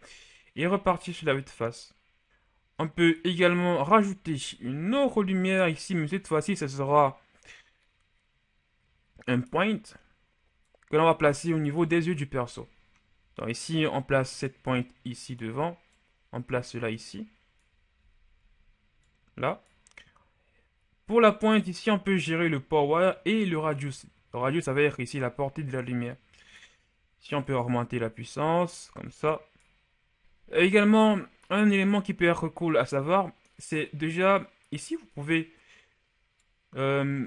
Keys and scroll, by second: 1.1 KP_1, 4.7 shift+a, 11.7 KP_1, 30.2 KP_7.